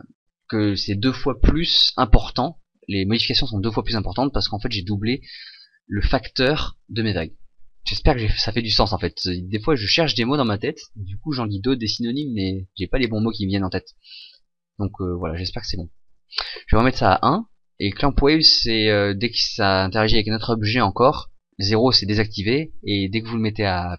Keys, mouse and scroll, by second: 16.5 click.